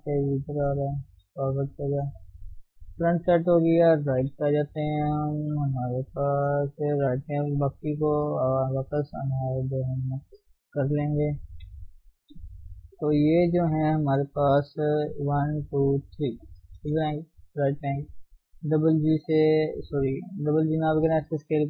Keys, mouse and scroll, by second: 0.8 click, 1.0 g, 1.6 shift+z, 1.7-2.9 middle drag, 2.9 KP_7, 4.3 KP_1, 4.7-5.9 scroll up 1, 5.9 a, 6.2 a, 6.7 click, 7.4 alt+h, 8.5 click, 8.7-10.9 middle drag, 10.9 click, 11.2 KP_1, 11.5 KP_3, 12.5 middle click, 13.3 shift+click, 13.8 shift+click, 14.0-15.2 middle drag, 15.2 click, 16.2 shift+click, 16.8 KP_3, 17.5 shift+z, 18.5 g, 20.5 s.